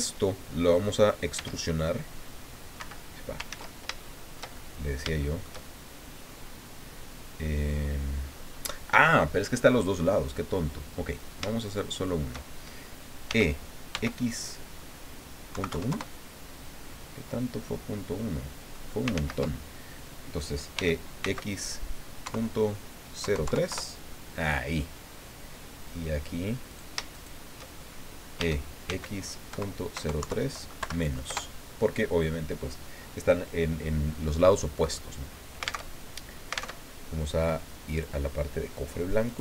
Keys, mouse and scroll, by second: 1.3 e, 2.8 Escape, 3.5 ctrl+z, 4.0-5.1 ctrl+shift+drag, 5.2-6.4 shift+middle drag, 7.4-8.8 middle drag, 11.1 shift+right click, 11.6 shift+right click, 13.2 e, 13.9 x, 15.5 KP_Decimal, 15.7 KP_1, 15.9 KP_Enter, 17.4-18.9 drag, 19.1 ctrl+z, 20.7 e, 21.2 x, 22.2 KP_Decimal, 23.2 KP_0, 23.4 KP_3, 23.7 KP_Enter, 24.9-26.1 drag, 26.7 shift+right click, 27.1 shift+right click, 28.4-30.2 typing, 31.3 KP_Enter, 34.5 click, 35.8 alt+Tab, 36.7 alt+Tab, 37.9 click, 39.3 click.